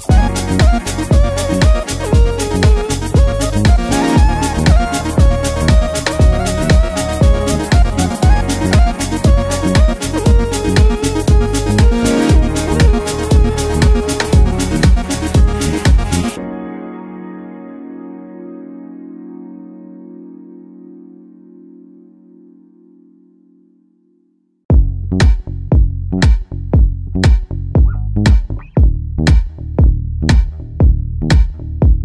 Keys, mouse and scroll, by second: 0.5 ctrl+z, 2.2-7.3 drag, 7.7 ctrl+z, 9.1-16.0 drag, 16.5 ctrl+z, 20.7 click, 23.7 right click, 24.8 click, 27.5-29.0 shift+drag.